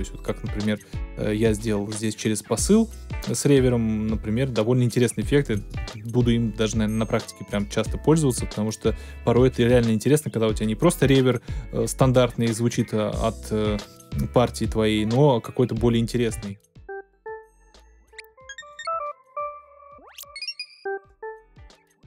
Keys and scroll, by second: 16.3 space.